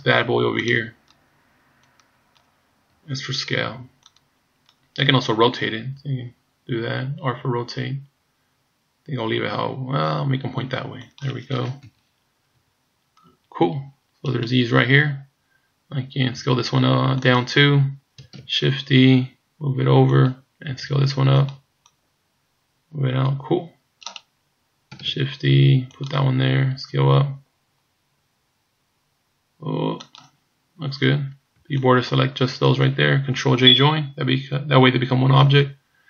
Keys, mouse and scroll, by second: 0.7 click, 1.9 click, 2.9 s, 4.1 click, 6.0 r, 11.8 KP_1, 12.6 KP_3, 14.3 right click, 16.4 s, 18.4 shift+d, 20.7 s, 22.0 click, 24.1 right click, 25.1 shift+d, 26.8 s, 31.6 b, 35.4 ctrl+j.